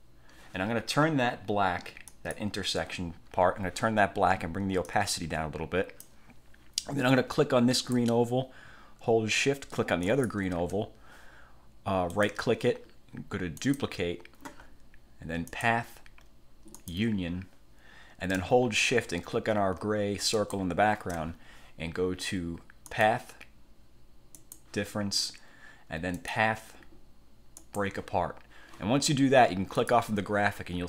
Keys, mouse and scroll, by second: 2.2 click, 5.0-6.4 drag, 7.9 click, 10.2 shift+click, 12.2 click, 13.7 click, 15.6 click, 16.9 click, 20.4 shift+click, 23.0 click, 24.5 click, 26.3 click, 27.7 click, 29.9 click.